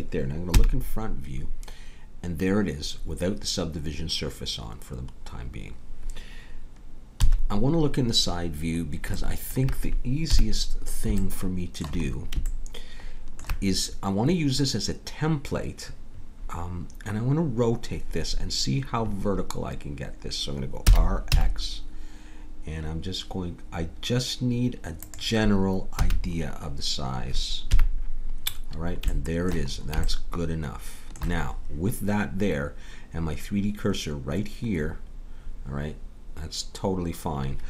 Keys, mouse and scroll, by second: 0.5 KP_1, 7.2 KP_3, 10.3 KP_3, 20.8 r, 25.9 a, 27.7 KP_1, 28.4-29.5 middle drag.